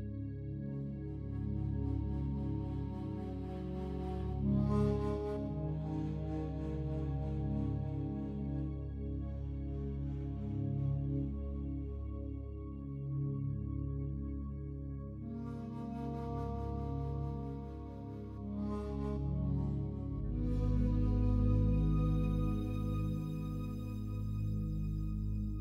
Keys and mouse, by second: 0.0-3.4 drag, 0.0 space, 4.2 click, 5.0 g, 6.1 Escape, 6.9 click, 8.3 ctrl+alt+click, 8.8-10.5 alt+drag, 10.9-12.2 alt+shift+drag, 14.4-21.9 drag, 21.9 g, 23.5 Escape.